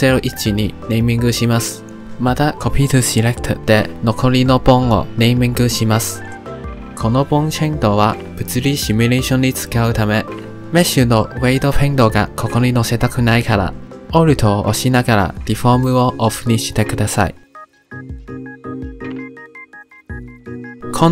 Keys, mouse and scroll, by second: 3.3 l, 4.3-6.1 right drag, 6.1 click, 17.4 alt+click, 18.3 click, 18.8 click, 19.3 click, 19.6 click, 20.0 click, 20.3 click, 20.7 click.